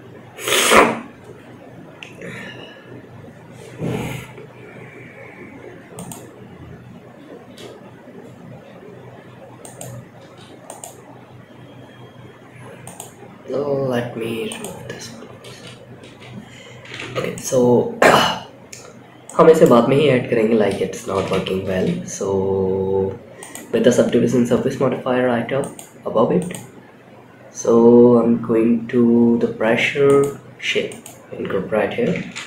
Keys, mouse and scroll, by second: 5.7-6.4 scroll down 1, 6.4-9.9 drag, 9.9 space, 10.0 click, 12.1 click, 13.8 click, 14.7 space, 15.3 space, 16.3 shift+Left, 16.6-17.3 middle drag, 17.6-18.3 scroll up 2, 18.6 middle click, 20.4 space, 20.9 space, 22.7 click, 23.5-24.1 scroll down 2, 24.9 click, 25.7 click, 26.5-28.8 scroll down 10, 29.4-30.4 drag, 31.5 shift+Left, 32.0 space.